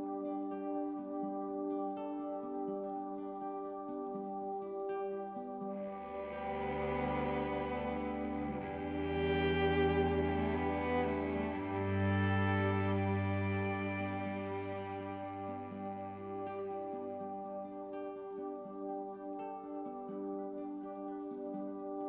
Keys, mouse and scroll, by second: 0.9 click, 1.4-6.1 middle drag, 6.1-7.6 drag, 7.6-7.9 scroll down 1, 8.2-8.9 scroll down 1, 8.9-9.6 scroll down 1, 10.6-18.6 shift+middle drag, 18.6-19.0 scroll down 1, 19.0-22.0 drag.